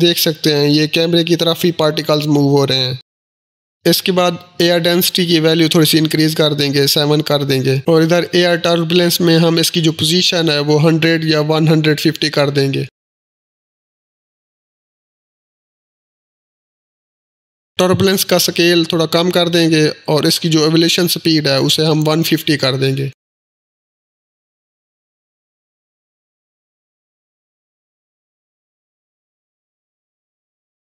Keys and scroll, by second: 7.2 Return, 7.2 7, 9.4-11.4 typing, 21.6-22.9 typing.